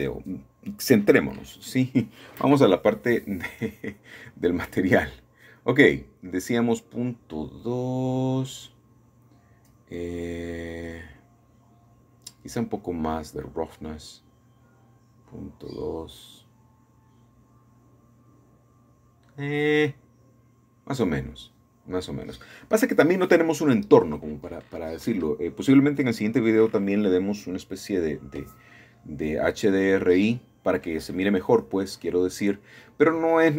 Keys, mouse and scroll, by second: 0.8 middle click, 3.0-4.1 drag, 4.4 KP_Decimal, 6.0 KP_2, 6.2 Return, 11.2-12.2 middle drag, 12.2-13.3 drag, 18.8 middle click, 19.1-22.0 scroll up 2, 22.0-23.2 middle drag, 22.4-24.7 scroll down 2, 24.7-25.0 scroll down 1, 25.0 middle click, 25.3-26.6 scroll up 1, 26.6-27.6 shift+middle drag, 29.2-30.7 drag, 32.4-33.5 drag.